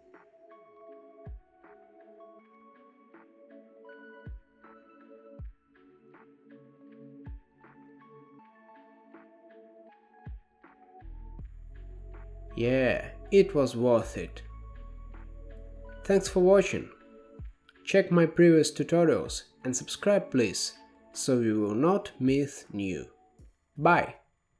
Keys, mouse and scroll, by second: 1.0 click, 2.5-3.9 drag, 4.1-4.7 scroll down 1, 4.7 ctrl+b, 6.8-7.5 drag.